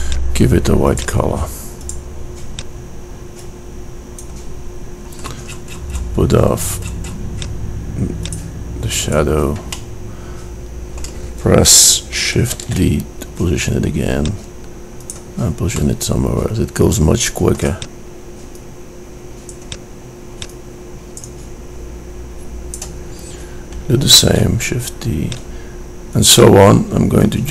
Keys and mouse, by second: 6.6-10.0 middle drag, 11.9 shift+d, 17.8 middle click, 17.9 click, 22.4 middle click, 23.6 shift+d, 26.5 click.